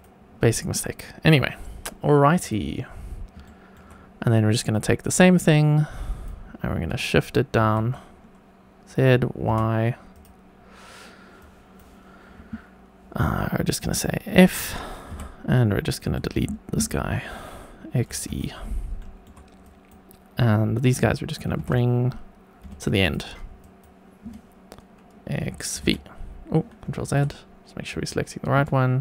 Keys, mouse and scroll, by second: 2.4 click, 3.1 scroll down 1, 3.4 shift+middle click, 3.9-4.6 scroll up 1, 4.7-6.2 drag, 7.5 shift+d, 9.4 y, 10.1 click, 11.3 click, 13.3 click, 15.1 f, 16.0 2, 16.2 click, 17.9 x, 18.9 shift+middle click, 19.6 click, 21.4 g, 21.6 y, 22.6 x, 23.0 click, 23.6 click, 25.5 x, 26.9 ctrl+z, 27.9 click.